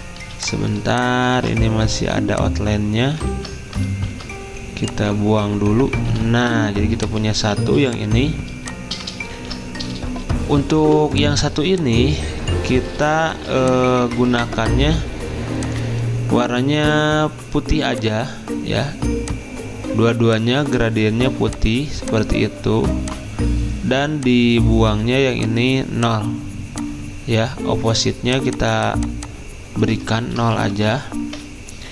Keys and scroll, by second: 0.2 typing, 1.3 typing, 3.3 ctrl+z, 4.1 ctrl+2, 6.1 Delete, 7.6 z, 9.4 ctrl+alt+2, 13.3 ctrl+2, 14.2 ctrl+z, 15.4 v, 30.2 ctrl+a, 30.3-31.2 typing.